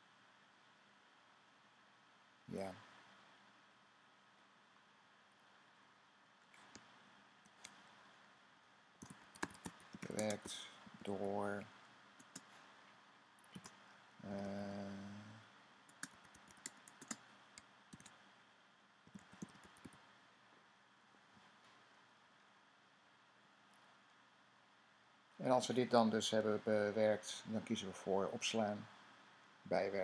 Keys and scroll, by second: 6.9 typing, 8.4-11.5 typing, 13.4-20.2 typing, 21.9 typing.